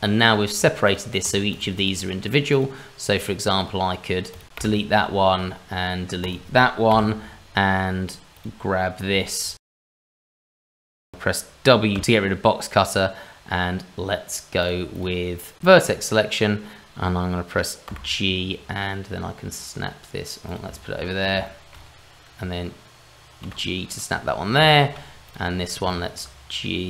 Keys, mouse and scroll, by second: 0.2 click, 0.6 scroll down 2, 0.8 click, 1.2 click, 4.5 Delete, 6.2 click, 6.9 Delete, 8.3 click, 9.1 shift+middle click, 9.6 scroll up 1, 9.7 middle click, 10.1 click, 10.5 click, 10.8 shift+middle click, 10.9 scroll down 2, 11.1 shift+middle click, 11.9 w, 12.0-12.4 scroll down 1, 14.6 click, 14.9 click, 20.7 shift+middle click, 21.0-22.8 scroll up 3, 21.4 shift+middle click, 22.8-23.4 scroll up 1, 23.4 g, 24.1-24.7 scroll down 3, 24.7 shift+middle click, 25.2 click, 25.5 scroll up 2, 25.9 shift+middle click, 26.6-26.8 scroll up 1.